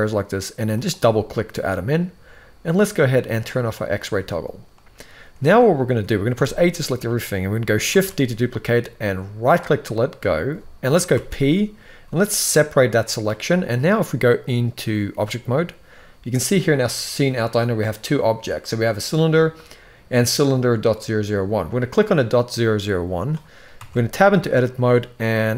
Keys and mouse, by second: 3.3 click, 6.1 a, 7.6 shift+d, 10.8 p, 14.2-15.0 drag, 19.8 click, 23.5 Tab, 25.2 z.